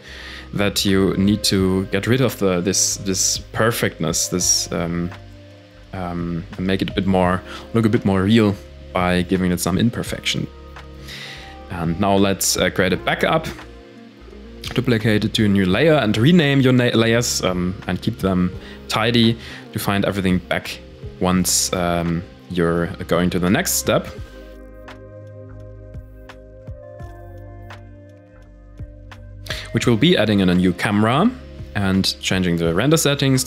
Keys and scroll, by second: 5.3 ctrl+s, 6.2 ctrl+s, 8.1 shift+d, 9.0 m, 14.6 ctrl+s, 20.4 KP_1, 21.0 KP_1, 23.2 shift+a, 29.2 shift+a.